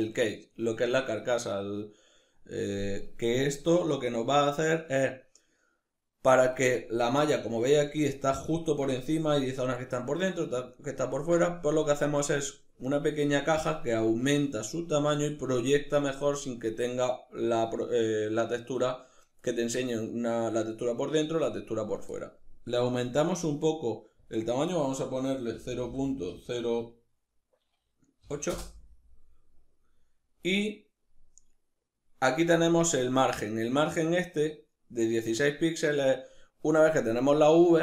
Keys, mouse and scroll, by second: 7.9-22.5 ctrl+middle drag, 22.5-23.6 drag, 23.9-37.8 drag.